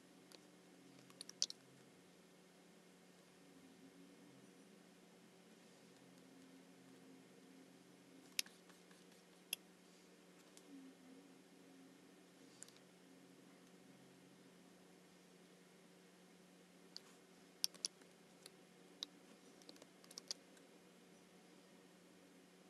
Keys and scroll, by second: 1.2 alt+super+b, 8.4 space, 17.7 super+c, 20.1 alt+super+b.